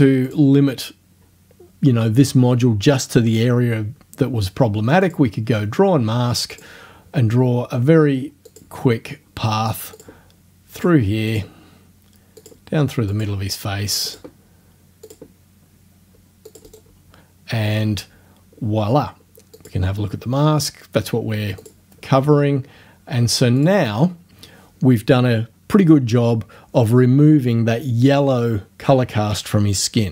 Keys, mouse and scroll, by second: 0.3 click, 5.1 click, 6.6 click, 8.5 click, 10.0 click, 10.8 click, 11.3 click, 12.4 click, 13.1 click, 14.1 click, 15.1 click, 16.5 click, 16.7 right click, 19.6 click, 21.6 click, 23.6 click.